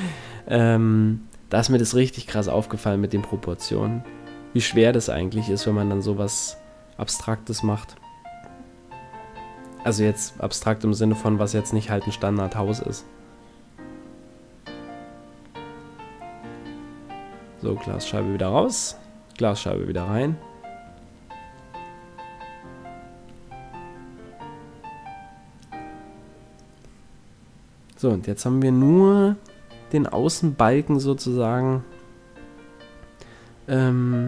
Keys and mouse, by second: 1.5 r, 4.1 s, 6.1 click, 6.4 middle click, 7.1 z, 7.7 s, 12.2 s, 15.7 x, 18.3 ctrl+z, 19.9 ctrl+Tab, 21.7 ctrl+Tab, 22.5 x, 25.5 ctrl+z, 26.0 x, 32.4 right click, 32.5 s.